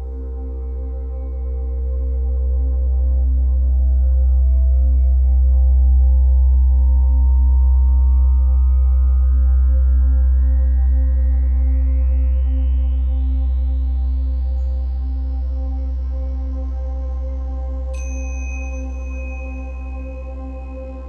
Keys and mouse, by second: 1.4-1.8 typing, 2.0 click, 2.8-3.6 typing, 3.0 click, 3.6 shift+click, 4.3 shift+click, 5.0 shift+click, 7.2-8.2 typing, 8.4 click, 9.3-13.7 shift+drag, 10.5-11.4 typing, 16.9 /, 19.0-19.5 typing, 19.8-20.8 drag, 20.5 typing.